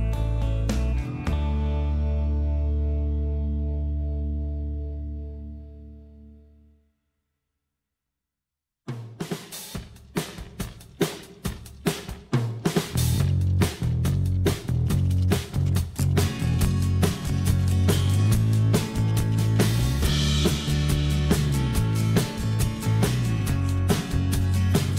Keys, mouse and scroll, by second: 7.3 F2, 16.4 o, 20.3 m, 24.3 s.